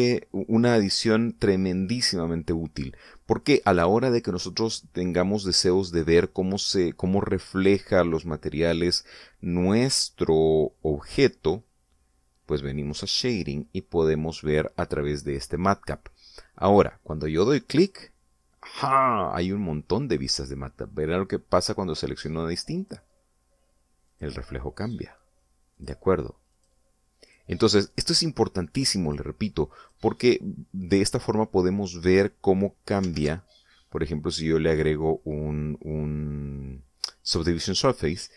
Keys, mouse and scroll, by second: 13.8 click, 18.7 click, 23.7 click, 25.1 click, 25.8 click, 26.7 click, 27.5 click, 28.2 click, 28.9 click, 30.0 click, 30.8 click, 34.1 ctrl+2.